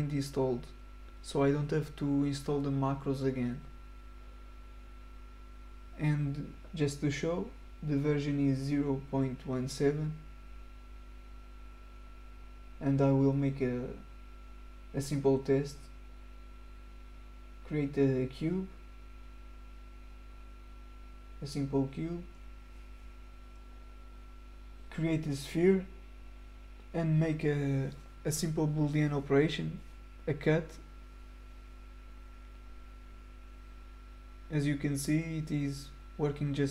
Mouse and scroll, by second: 3.8 click, 5.1 click, 11.3 click, 15.9 click, 17.3 click, 20.0-22.2 middle drag, 20.3-24.2 right drag, 22.2-24.1 middle drag, 25.6 click, 30.0 click, 31.3 ctrl+click, 32.6 click, 33.7-36.5 middle drag, 34.0-36.6 right drag.